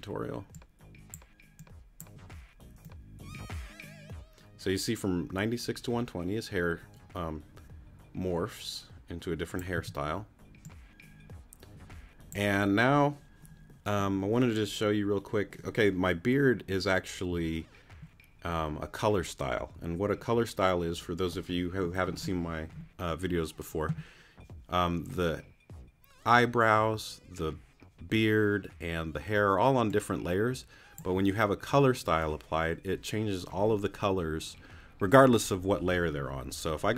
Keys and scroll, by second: 9.7 t.